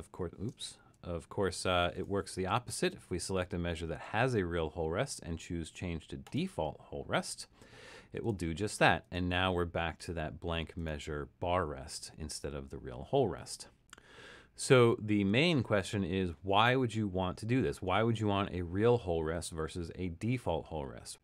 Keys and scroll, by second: 0.8 super+z.